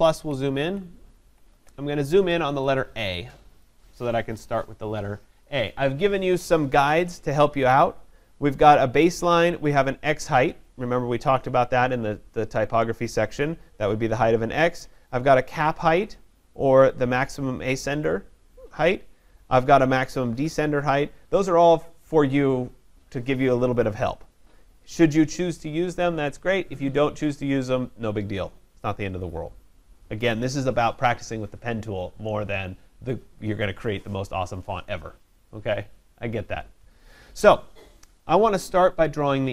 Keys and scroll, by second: 0.1 ctrl+=, 0.7 ctrl+=, 3.1 ctrl+=.